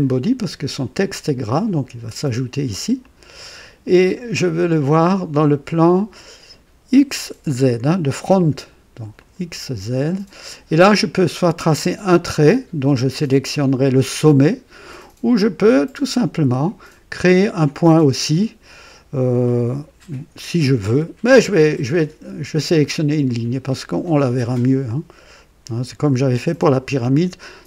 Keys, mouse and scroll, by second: 3.0 click, 9.1 click, 10.0 click, 23.2 click, 26.3 click.